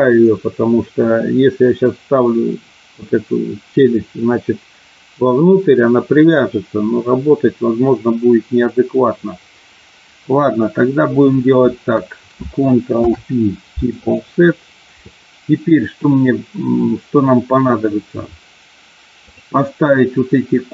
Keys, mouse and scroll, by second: 12.9 ctrl+p, 19.4 click.